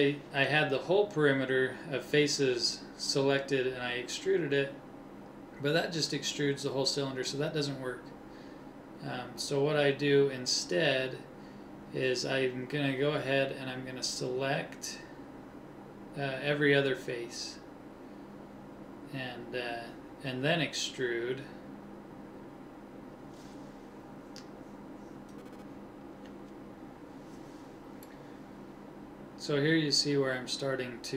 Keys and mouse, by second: 4.5 click, 6.0 ctrl+z, 6.3 ctrl+z, 25.5 KP_1, 27.0-28.7 drag, 28.7 middle click, 29.5 KP_1.